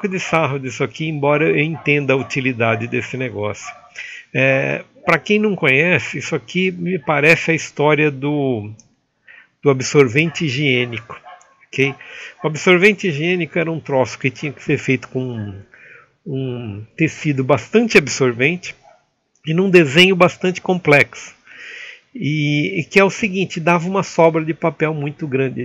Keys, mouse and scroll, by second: 1.4 Escape, 4.6-5.8 middle drag, 7.2 shift+middle click, 8.1 alt+a, 8.4 Escape.